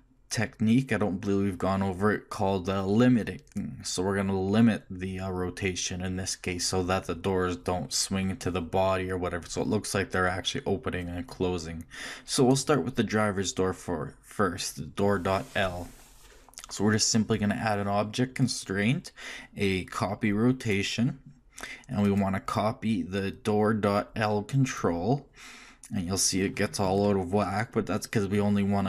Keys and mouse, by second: 18.4-20.7 drag, 22.0-26.8 drag.